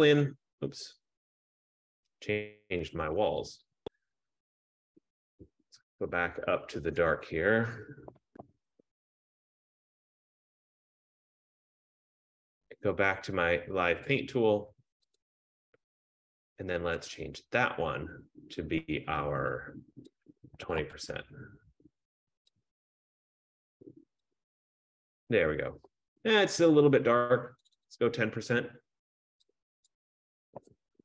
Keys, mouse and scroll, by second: 4.3 click, 4.4 click, 8.1 click, 8.8 typing, 10.3 click, 14.9 click, 15.3 click, 17.3 click, 17.5 click, 20.4 click, 20.5-21.5 typing, 22.8 click, 24.5 click, 28.1 click, 30.1 click, 30.5-31.0 typing.